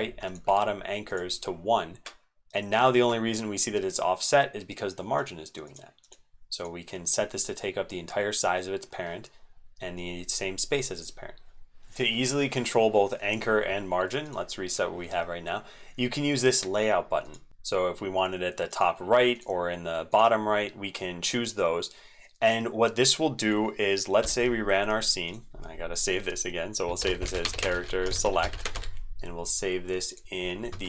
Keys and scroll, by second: 11.7 ctrl+z.